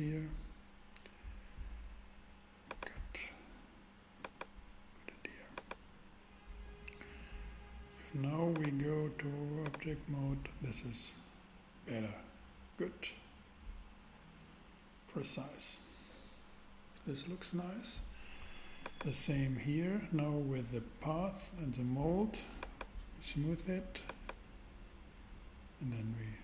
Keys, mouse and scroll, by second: 2.6-4.4 drag, 8.5-9.6 drag, 9.7 click, 16.0-18.4 middle drag, 18.8-20.1 super+drag, 22.5-24.2 drag.